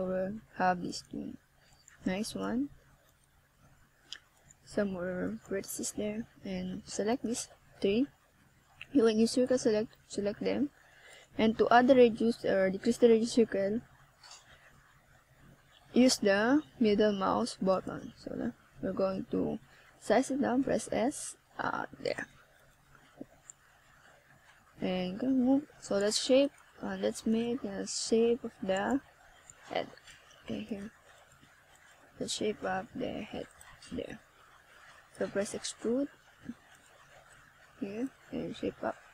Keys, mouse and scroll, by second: 2.6 Tab, 3.6-5.2 scroll up 3, 5.2 click, 9.7 KP_1, 12.7 click, 14.7 click, 17.8-18.7 scroll down 1, 18.7 scroll down 1, 18.7 r, 20.7 click, 21.7 KP_7, 23.3 r, 25.1 click, 26.4 g, 28.4 click, 28.7 r, 30.1 click, 30.7 KP_1, 32.1 middle click, 33.5 middle click, 34.9 click, 37.1 r, 39.0 click.